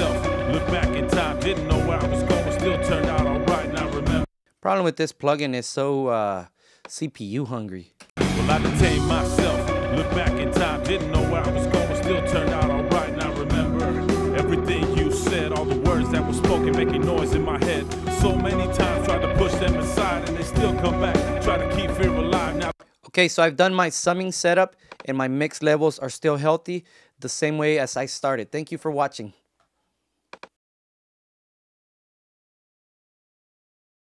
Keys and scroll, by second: 22.5 space.